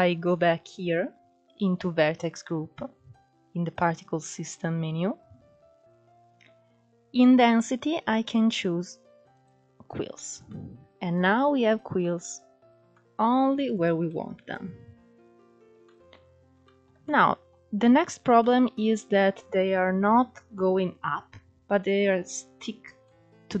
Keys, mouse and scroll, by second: 1.1-1.6 scroll down 12, 3.3-5.7 scroll up 22, 5.7-6.7 scroll down 14, 8.9-11.3 drag, 11.3 middle click, 12.2-12.8 scroll up 3, 12.8-13.5 middle drag, 13.5 scroll down 1, 13.7-14.5 middle drag, 14.5 click, 14.7 scroll down 3, 14.9 middle click, 15.6-16.6 scroll up 3, 16.6-17.0 shift+middle drag, 17.0-17.4 scroll up 2, 17.4-18.4 shift+middle drag, 18.4-18.8 scroll up 1, 18.8-20.6 shift+middle drag, 20.6-21.0 scroll up 1, 21.0-22.6 middle drag, 22.6 scroll down 2, 22.7-23.1 middle drag, 23.1-23.6 scroll up 2.